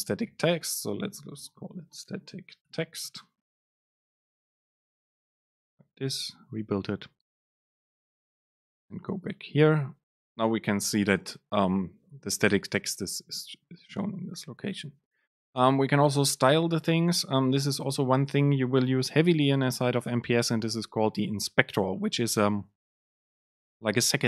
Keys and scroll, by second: 6.3 ctrl+shift+super+F9.